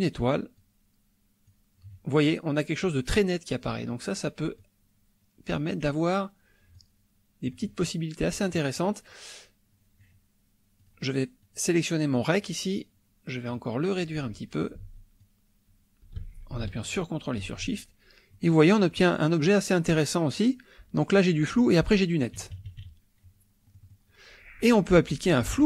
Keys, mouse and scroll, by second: 0.5-1.7 drag, 4.6-5.7 drag, 6.8 click, 10.8 click, 11.4 click, 13.5 click, 15.2-17.6 ctrl+drag, 18.4-19.1 drag, 22.4 KP_Subtract, 23.7 click, 25.4 F2.